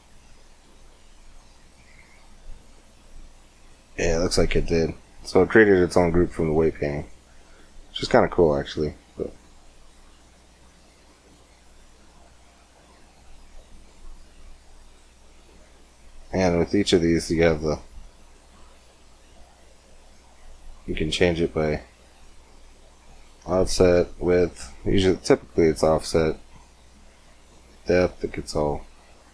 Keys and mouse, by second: 2.2-4.2 middle drag, 6.8-8.0 drag, 8.0 Tab, 11.5 click, 13.0-20.7 drag, 22.8-28.0 drag, 28.0-29.1 middle drag.